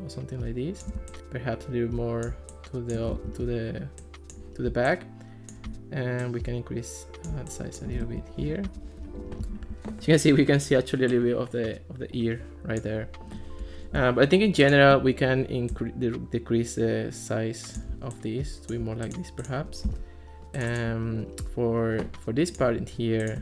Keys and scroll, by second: 3.2 super+z, 8.1 super+z, 8.7 alt+r, 19.9 Escape.